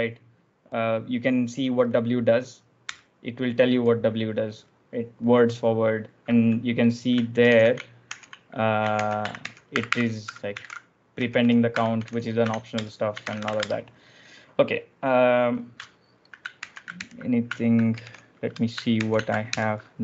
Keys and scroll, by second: 2.8 Return, 7.2 ctrl+j, 7.4 ctrl+k, 7.9 shift+h, 8.9 ctrl+j, 9.1 Escape, 9.3-14.0 typing, 15.8 ctrl+j, 16.5 ctrl+j, 16.7-20.0 typing, 18.9 ctrl+j.